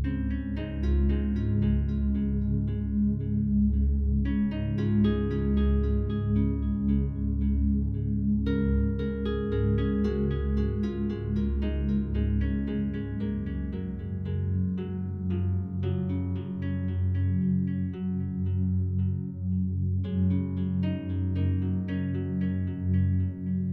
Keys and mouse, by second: 1.6 click, 2.6 click, 4.2 1, 6.0 shift+s, 6.9 click, 7.9 click, 8.9 typing, 9.1 click, 11.0 click, 11.8 click, 12.8 click, 14.0 typing, 15.6 click, 16.2-16.5 typing, 17.8 click, 18.8 typing, 19.5-20.3 drag, 21.1 Tab.